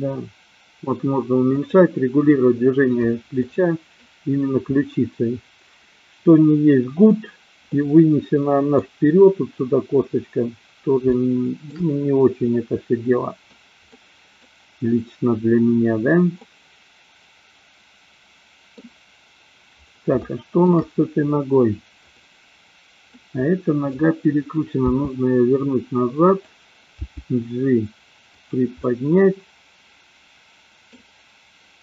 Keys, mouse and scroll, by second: 1.7 click, 3.5 middle click, 7.7-9.2 middle drag, 11.2 shift+middle click, 12.5-13.6 middle drag, 14.0 middle click, 16.5-18.8 middle drag, 20.3 shift+middle click, 22.0 click, 23.1 middle click, 25.0 r, 27.1 g, 28.8-31.0 middle drag.